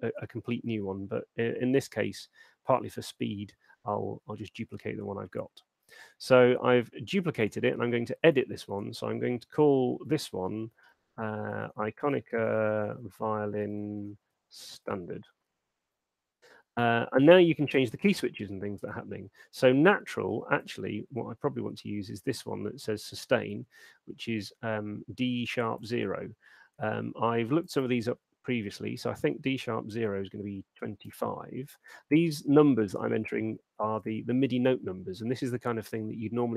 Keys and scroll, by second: 10.5-15.5 typing, 30.2-30.9 typing.